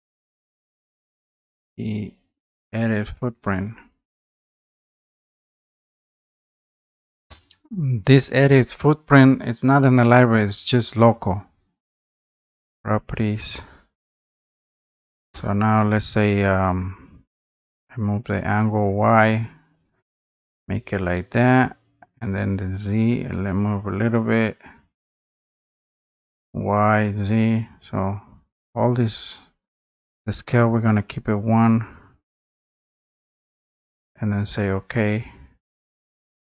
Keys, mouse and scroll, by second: 3.7 click, 5.1 click, 6.3-8.5 drag, 8.7 click, 9.9 click, 12.9-15.9 drag, 16.5-17.7 drag, 18.9 click, 19.2 click, 19.4 click, 19.9 click, 22.3 click, 26.1 click, 27.0 click, 27.9 click, 34.7 click.